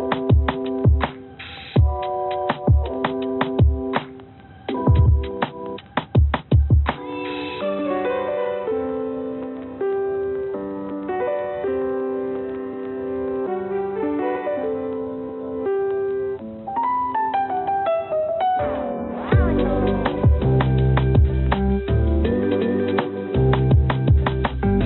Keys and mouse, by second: 0.0 g, 1.8 click, 3.1 g, 4.7-5.7 drag, 5.7 g, 8.4-11.9 drag, 8.4-11.9 right drag, 12.4 g, 15.1 click, 16.2 click, 16.5 click, 16.8 click, 17.2 click, 17.2 right click, 18.8 g, 23.5 click, 23.5 right click.